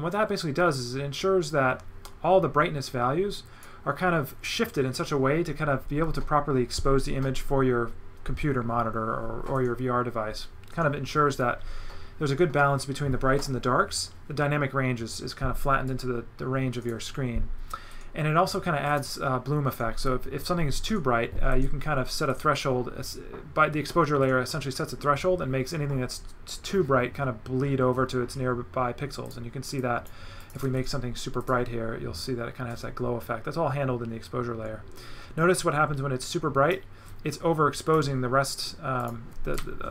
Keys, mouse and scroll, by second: 2.0 right click, 15.9 right click, 18.9 click, 29.3 click, 29.8 click, 30.4 click, 30.6 right click, 31.4 click, 32.2 click, 37.1 click, 39.0 click, 39.5 right click.